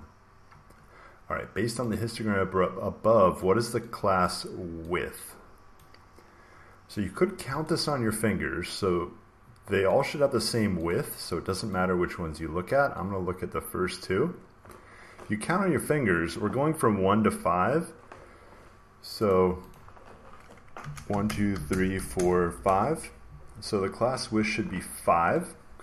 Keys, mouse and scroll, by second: 3.3 click, 3.9 click, 5.7 click, 7.6 click, 10.0 click, 10.8 click, 11.6 click, 13.8 click, 19.2 click, 19.6 click, 20.5-22.8 typing.